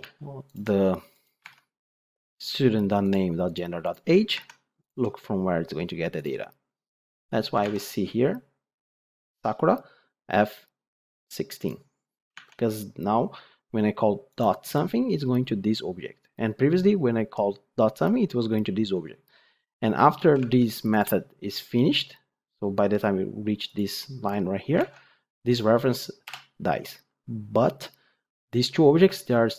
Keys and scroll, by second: 1.4 ctrl+Tab.